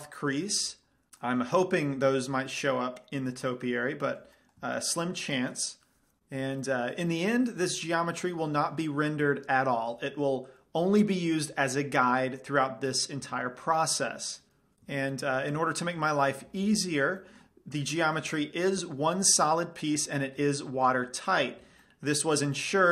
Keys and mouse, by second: 1.4 middle click, 6.2 middle click, 11.3-12.5 middle drag, 20.2-22.1 drag, 20.5 Tab, 21.8 Tab, 22.1-22.9 middle drag.